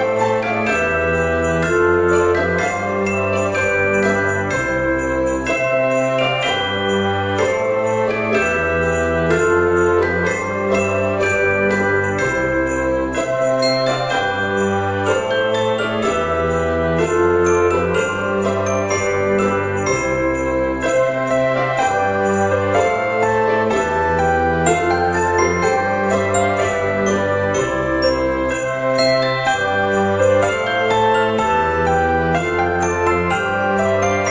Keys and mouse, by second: 0.4 click, 1.3 click, 2.0 shift+a, 2.4 click, 2.9 d, 3.8 click, 5.6 click, 7.1 shift+a, 7.6 click, 7.9 v, 8.4 click, 12.0 click, 12.8 F6, 13.8 click, 14.8 click, 15.5 KP_1, 16.1 KP_0, 16.6 Return, 16.6 KP_Enter, 19.3 F6, 20.9 click, 23.0 F6.